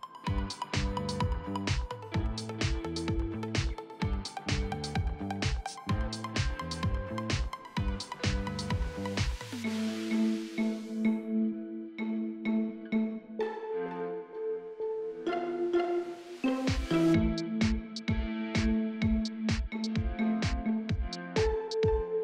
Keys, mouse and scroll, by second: 0.8 scroll down 1, 1.3 right click, 1.6-2.6 scroll up 1, 2.6 click, 2.8-3.2 scroll down 1, 3.2 scroll up 1, 4.3 click, 4.6-5.2 scroll down 1, 5.2 right click, 5.6 click, 7.3-8.1 typing, 9.2 click, 9.7 right click, 10.1 click, 10.3 Tab, 10.6 scroll down 1, 10.9-11.9 scroll up 1, 11.9-13.2 scroll down 1, 13.2 click, 13.4 scroll down 1, 13.6 scroll up 1, 13.7 right click, 15.5-17.0 typing, 17.2 right click, 17.7 scroll up 1, 17.9-21.2 right drag, 21.2-21.5 scroll up 1, 21.5 right click.